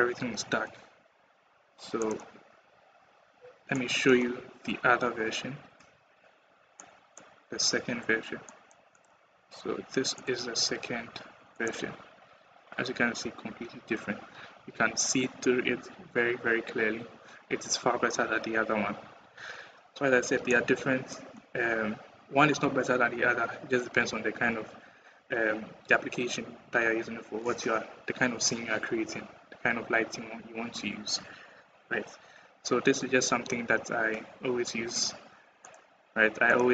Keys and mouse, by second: 1.8 click, 3.5 click, 6.6 click, 8.3 click, 8.7 click, 11.4 click, 20.3 middle click, 36.3 click.